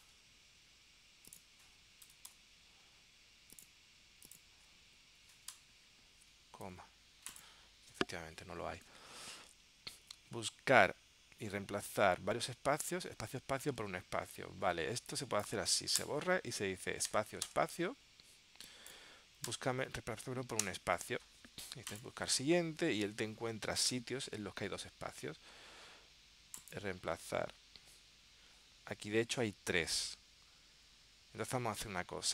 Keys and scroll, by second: 9.0 super+Tab, 13.9 super+Tab.